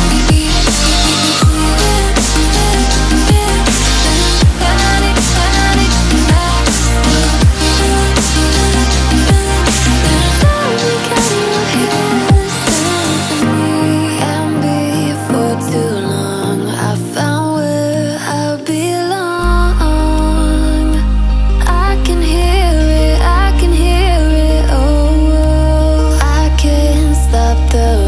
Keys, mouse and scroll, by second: 2.5-8.3 drag, 9.8 click, 17.9 click, 21.2-21.5 alt+scroll up 1, 21.8 click, 27.2 click.